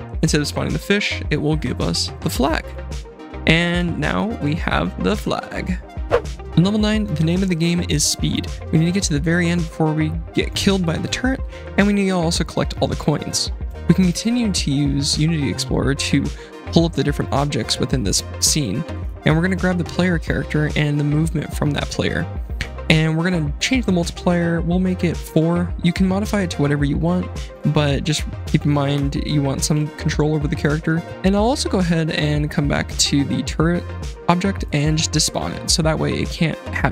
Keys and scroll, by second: 3.4-5.7 typing, 9.4 d, 14.0 F7, 29.3 BackSpace, 29.7 KP_4.